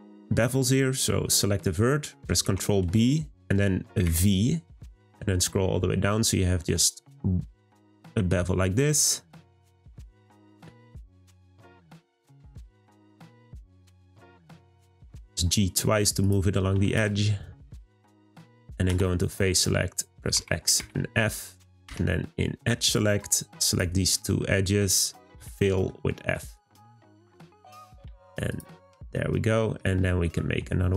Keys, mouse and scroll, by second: 0.1 scroll up 2, 1.6 middle click, 2.4 b, 11.1 shift+middle click, 11.6 scroll up 2, 12.4 click, 12.8 g, 16.2 click, 16.7 g, 19.5 click, 22.8 click, 23.6 shift+click, 24.4-25.4 middle drag, 25.4 f, 25.6 middle click, 26.5 click, 27.5 shift+click, 28.0 f, 28.4 click, 28.8 scroll down 2, 29.1-30.2 middle drag, 30.2 1.